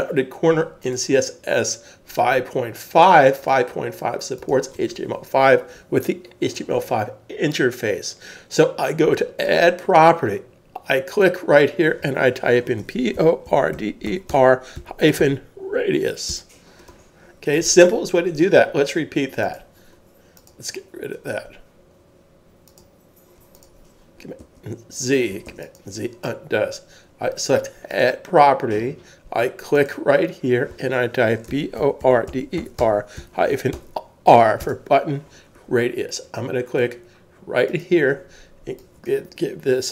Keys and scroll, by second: 12.9-17.1 typing, 24.4 super+z, 31.5-33.8 typing, 34.6 Return, 34.9 typing.